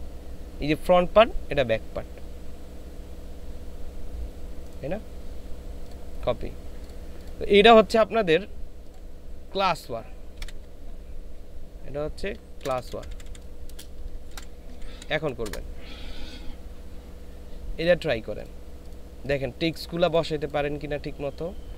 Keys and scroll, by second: 10.5 ctrl+v, 12.7-15.4 typing.